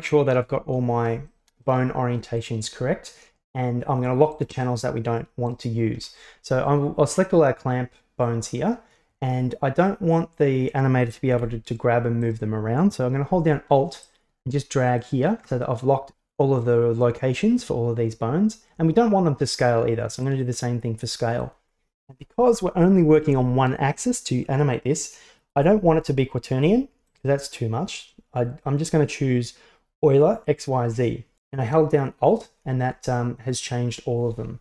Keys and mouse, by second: 1.4 shift+middle drag, 2.5 shift+right click, 4.4 shift+right click, 5.5 shift+right click, 11.4 g, 14.1-15.0 drag, 20.3-21.5 alt+drag, 27.1-31.4 alt+drag.